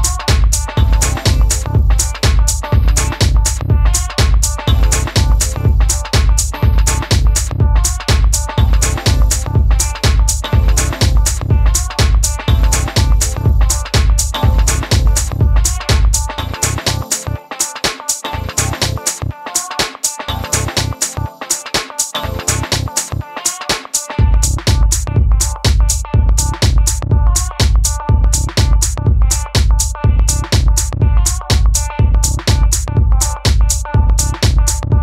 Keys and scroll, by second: 17.2 super+d, 17.8 d.